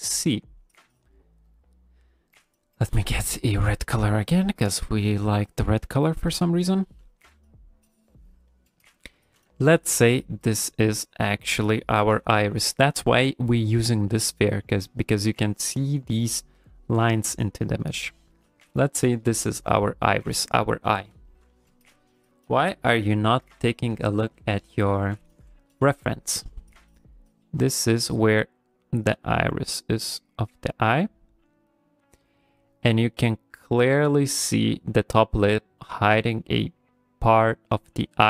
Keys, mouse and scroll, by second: 0.1 click, 1.5 click, 4.9 click, 5.2 click, 6.6 click, 7.9 click, 8.5 ctrl+middle click, 9.2 ctrl+middle click, 9.6 shift+middle click, 10.3 click, 10.8 click, 11.2 click, 11.5 click, 11.9 click, 12.1 click, 12.5 click, 12.7 click, 14.4 click, 14.7 click, 14.9 click, 15.2 click, 15.4 click, 15.7 click, 16.0 click, 16.3 click, 16.6 click, 16.9 click, 17.2 click, 17.5 click, 17.8 click, 18.1 click, 18.3 click, 18.6 click, 19.1 click, 19.3 click, 19.7 click, 19.9 click, 20.6 ctrl+middle click, 21.1 ctrl+middle click.